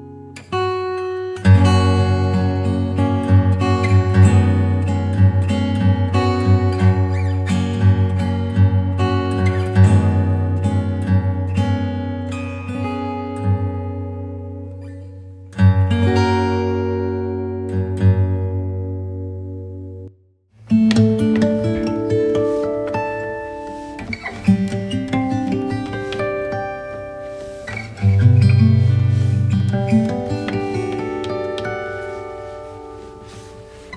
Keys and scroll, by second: 3.8 g, 4.6 shift+g, 7.5 shift+v, 29.5 super+i.